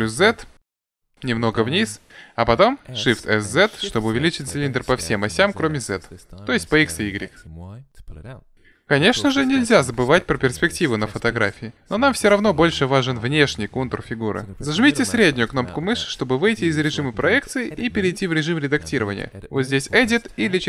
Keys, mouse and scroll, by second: 2.9 s, 14.6-16.6 middle drag, 18.8-20.6 drag, 20.4 Tab.